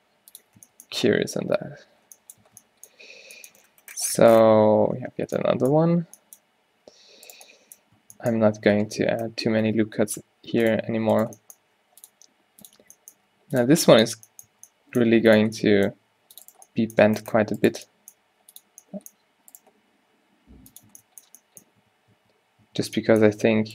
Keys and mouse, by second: 0.7 Tab, 1.2 Tab, 2.5-5.4 Tab, 6.8 g, 8.8 Tab, 9.7 Tab, 11.2-12.7 middle drag, 11.7 e, 12.3 g, 13.4 g, 13.8 Tab, 14.6 Tab, 15.6 g, 16.4 ctrl+r, 18.8 g, 20.3 g, 21.0 Tab, 21.8 Tab, 23.0 Tab, 23.1 Tab, 23.6 z.